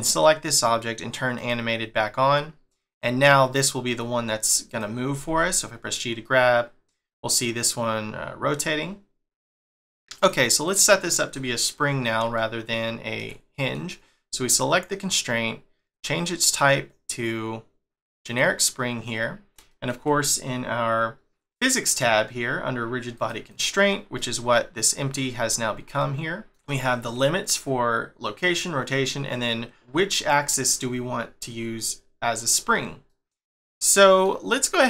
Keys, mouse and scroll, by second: 1.3 click, 1.8-2.9 scroll down 2, 2.9 click, 4.7 click, 5.2 g, 10.1 click, 10.6 click, 11.7-12.3 scroll up 1, 12.3 shift+middle click, 13.2 scroll up 1, 13.5 middle click, 14.5 click, 15.9 click, 19.1 scroll down 1, 19.7 shift+middle click, 23.1 click, 23.5 click, 24.1 middle click, 26.0 middle click, 26.6 shift+middle click, 32.6 scroll up 1, 33.1 middle click.